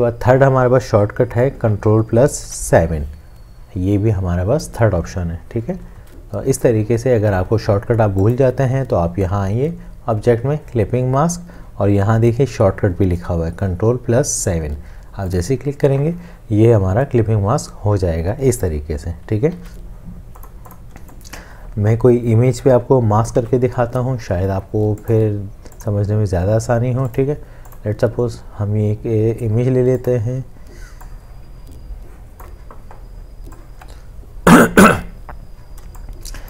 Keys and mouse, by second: 2.4 ctrl+7, 6.0 ctrl+z, 19.7 ctrl+z, 21.0 space, 35.8 space, 36.3 click.